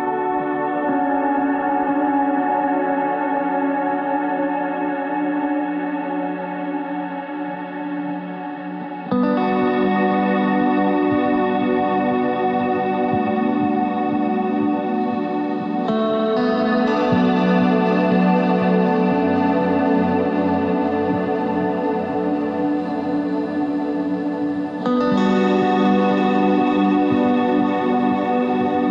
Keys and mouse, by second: 0.4 ctrl+z, 4.6 e, 6.9 Tab, 10.5 middle click, 12.1 click, 12.2 KP_1, 12.9 Tab, 16.5 ctrl+Tab, 17.1 click, 17.6 z, 18.1 c, 19.6 click, 19.9 z, 21.1 s, 24.0 Tab, 24.8 s, 27.6 KP_3, 28.3 r.